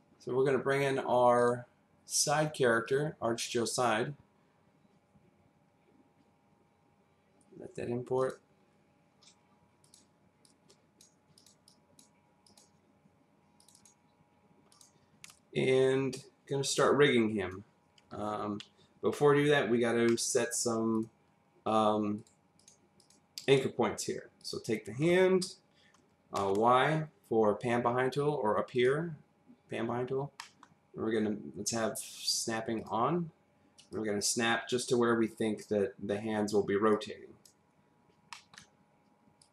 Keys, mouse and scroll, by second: 1.4 click, 2.1 click, 2.8 click, 8.2 click, 9.8 click, 10.4 click, 11.4 click, 11.6 click, 12.4 click, 13.6 click, 13.7 double click, 14.7 click, 15.3 click, 19.1-20.0 scroll up 1, 20.0 middle click, 20.9 click, 22.2 click, 22.6 click, 23.0 click, 23.4 click, 26.4 y, 28.7 click, 30.0-30.4 scroll up 1, 30.4 middle click, 32.7 click, 33.9 click, 36.9 click, 37.8-38.3 scroll up 1, 38.3 middle click, 38.4-38.8 scroll down 1, 39.4 click.